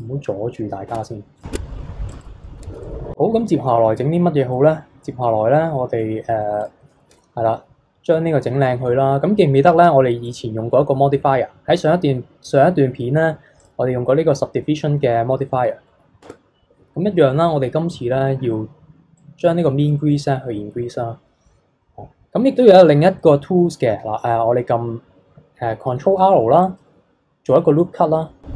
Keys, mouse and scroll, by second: 0.5-0.9 middle drag, 0.9 Tab, 1.4 click, 1.5 Tab, 2.1 click, 2.5 middle click, 2.8 KP_3, 4.5-6.6 middle drag, 6.6 click, 7.1 KP_3, 10.3-13.4 drag, 16.2 Tab, 19.2-22.3 drag, 26.0 ctrl+r.